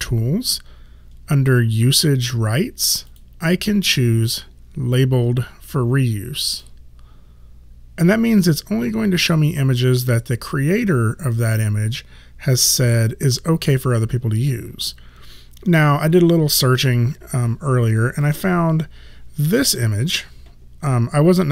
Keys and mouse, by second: 3.1 click, 6.4 click, 18.2 click.